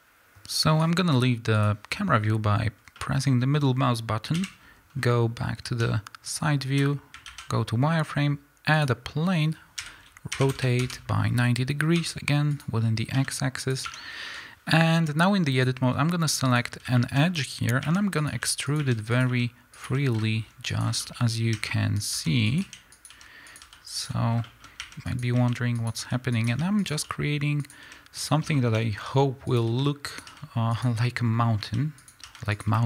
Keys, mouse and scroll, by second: 1.6 click, 2.8 scroll down 1, 3.0-4.4 middle drag, 4.4 KP_1, 5.0 scroll up 2, 5.0-12.6 middle drag, 5.8 z, 7.3 shift+a, 9.8 r, 10.9 KP_Enter, 12.0 g, 12.6 click, 13.2 s, 13.7 click, 13.9 Tab, 15.6 click, 16.5 click, 17.0-18.3 middle drag, 17.8-19.9 typing, 18.3 click, 18.8 click, 19.2 click, 19.8 click, 20.8 click, 21.0-22.1 middle drag, 21.5 e, 22.6 click, 23.0 click, 23.1 e, 23.6 click, 23.6 e, 24.1 click, 24.4 middle click, 24.8-27.8 typing, 25.2 click, 25.9 click, 26.4 click, 26.9 click, 27.7 click, 28.3 click, 28.5-29.6 middle drag, 28.9 scroll down 2, 29.0 e, 29.6 click, 29.7 e, 30.2 click, 30.3 e, 30.8 click, 31.2-31.6 scroll down 2, 31.6 e, 32.1 click, 32.2 e, 32.6 click.